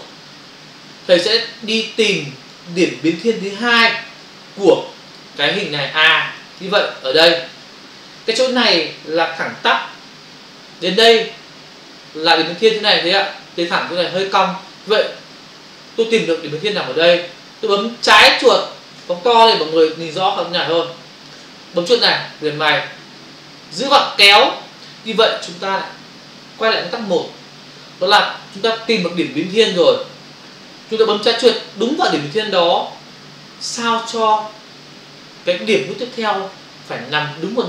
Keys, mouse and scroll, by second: 6.4 ctrl+click, 19.1 ctrl+click, 22.5 ctrl+click, 23.8 click.